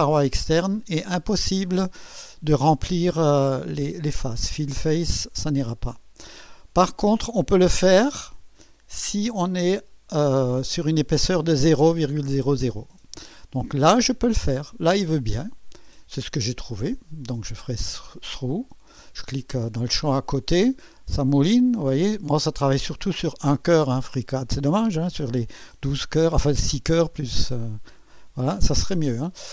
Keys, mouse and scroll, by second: 4.2 click, 14.5 click, 15.8 click, 17.2 click, 18.5 click, 29.1-29.5 drag.